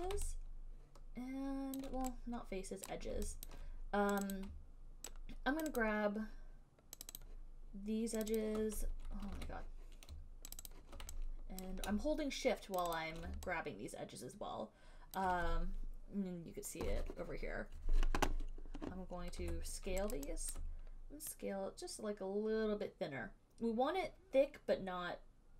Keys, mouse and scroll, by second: 0.1 shift+click, 2.0 alt+click, 3.1 right click, 3.7 alt+right click, 4.4 click, 4.6 click, 5.9 shift+right click, 6.0 shift+right click, 7.3 alt+right click, 7.4 shift+right click, 8.7 alt+click, 9.5 ctrl+z, 10.8 shift+click, 11.0 shift+click, 11.9 alt+click, 13.0 shift+click, 13.2 shift+click, 15.4 alt+click, 19.6 r, 20.8 alt+click.